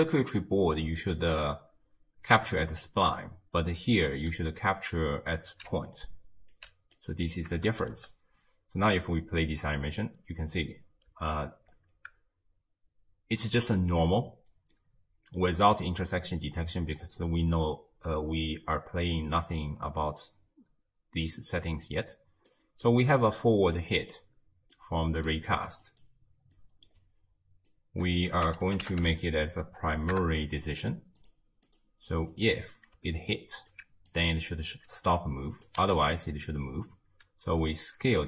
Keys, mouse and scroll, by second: 0.9-3.9 drag, 5.7 d, 6.0 right click, 6.6 d, 6.7 d, 7.0 click, 7.7 shift+space, 11.1 space, 11.7-14.7 scroll down 1, 14.7-17.3 middle drag, 17.3 drag, 23.1-23.8 middle drag, 23.8 click, 24.8 click, 25.9 click, 26.6-27.7 middle drag, 27.7 click, 31.7-33.1 drag, 33.1-34.1 alt+right drag, 34.1 click, 35.6 click, 37.6 click.